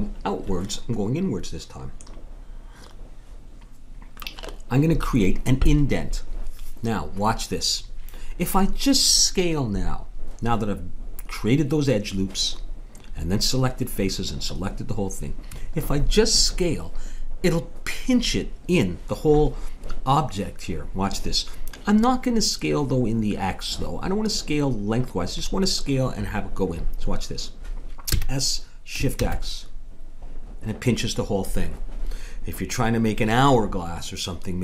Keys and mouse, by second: 28.1 s.